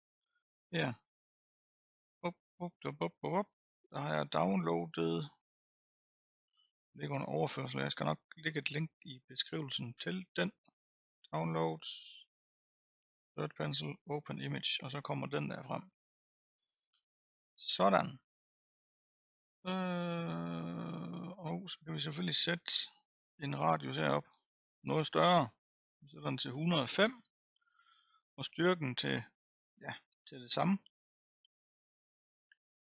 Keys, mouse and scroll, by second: 3.5 click.